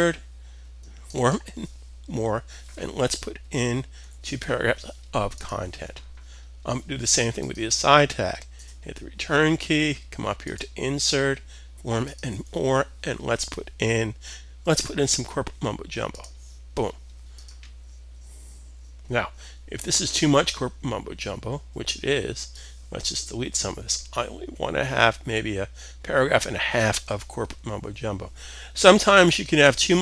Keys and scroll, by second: 3.5 2.